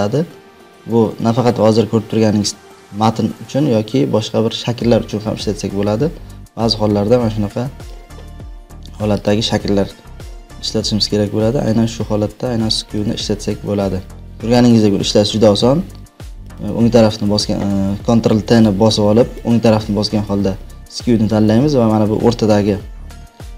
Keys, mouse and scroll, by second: 9.2 click, 10.6 click, 11.5 click, 12.0 click, 12.9-14.2 drag, 14.9 ctrl+t, 16.5 right click, 18.6 click, 19.5 right click, 21.3 click.